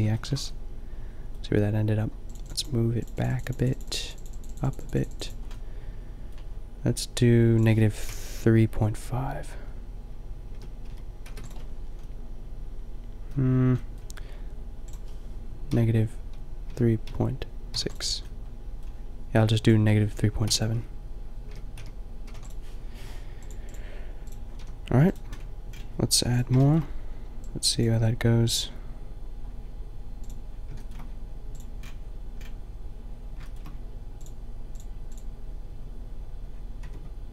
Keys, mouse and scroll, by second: 5.6-11.7 drag, 11.7-12.9 middle drag, 12.9-17.0 drag, 17.0-23.6 middle drag, 23.6 drag, 24.5 a, 25.3-27.7 middle drag, 29.6-30.6 middle drag, 36.9 Tab.